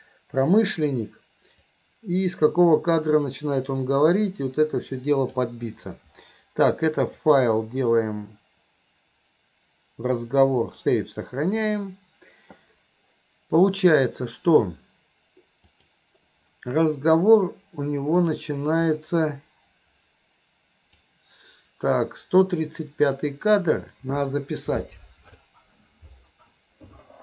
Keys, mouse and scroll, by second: 1.8-5.5 drag, 7.2-11.8 drag, 15.7 click, 18.3 click, 19.0-21.1 drag.